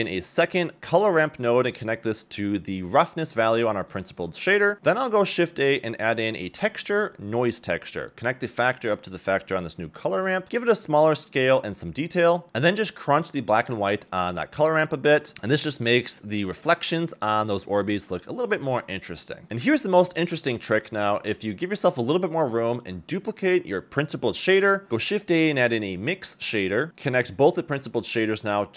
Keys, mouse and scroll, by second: 3.0 drag, 4.6 scroll down 1, 4.7 middle click, 5.6 shift+a, 7.7 scroll up 1, 8.8-9.8 drag, 10.5 click, 11.1 click, 11.8 click, 13.1-13.7 drag, 14.4-15.0 drag, 15.3 shift+middle click, 17.1 ctrl+shift+click, 18.1 middle click, 18.1 scroll down 2, 18.2 ctrl+shift+click, 19.8 a, 20.0 a, 21.9-22.2 scroll down 2, 22.2 middle click, 22.8 click, 23.1 shift+d, 25.0 scroll up 1, 25.2 shift+a, 28.7 middle click.